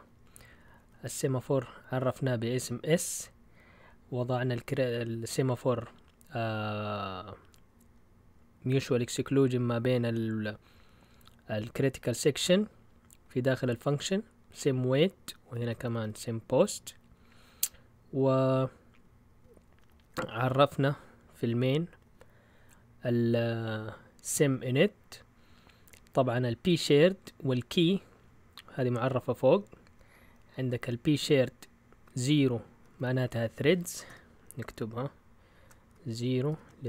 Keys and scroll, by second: 0.6-1.3 typing, 14.7 Down, 15.3-16.1 typing, 19.3 Down, 19.7 Down, 19.9 Down, 20.1 Down, 22.0 Down, 27.8 Up, 28.4-28.9 typing, 31.5-32.2 typing, 33.9-34.6 typing, 35.8-36.8 typing.